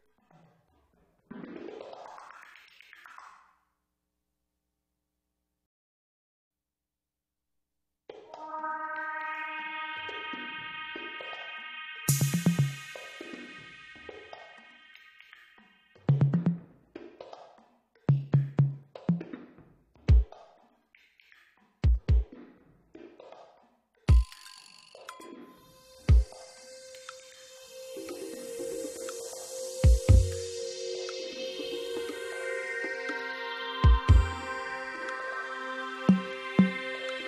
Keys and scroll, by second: 5.4 Tab.